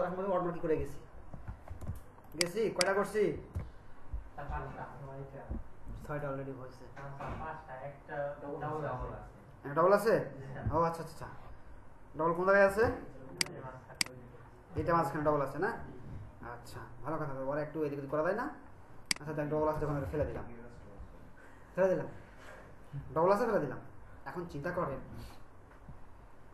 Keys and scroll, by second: 1.8 ctrl+alt+space, 12.8 ctrl+space, 20.2 BackSpace.